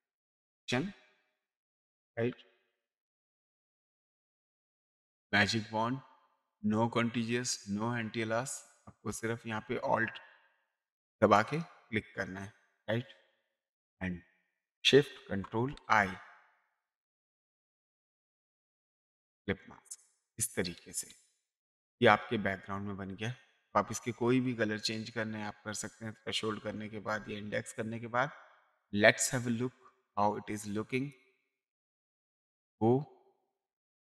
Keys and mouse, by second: 1.8 click, 3.0 click, 5.2 w, 11.4 alt+click, 17.3 click, 18.9 click, 21.1 space, 21.4 click, 24.1 space, 24.4 click, 25.7 ctrl+space, 26.5 click, 28.7 click, 30.6 click, 32.3 click.